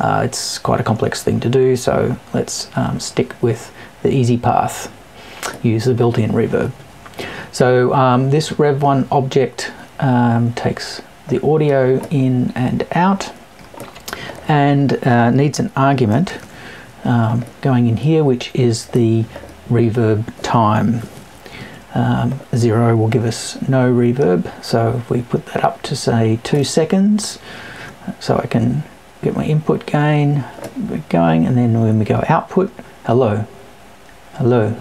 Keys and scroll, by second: 21.0 Left.